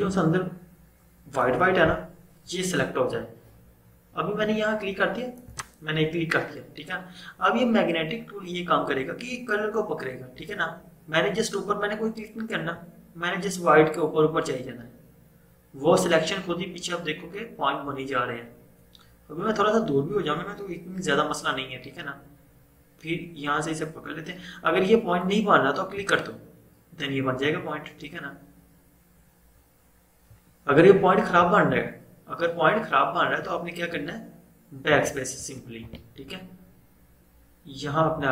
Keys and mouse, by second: 5.6 click, 26.0 click, 35.0 BackSpace.